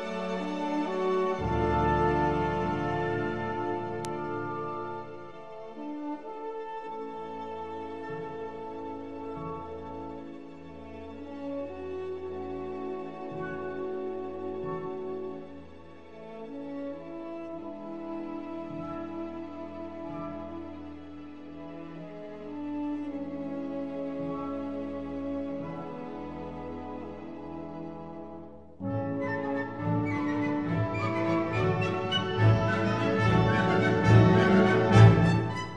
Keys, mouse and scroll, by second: 0.8 s, 7.2 Tab, 8.3-10.0 drag, 10.9 Tab, 13.2 g, 17.2-19.0 middle drag, 22.6 Tab, 23.8 x, 25.5 click, 26.2 Tab, 27.4-28.9 middle drag, 32.0-35.7 drag.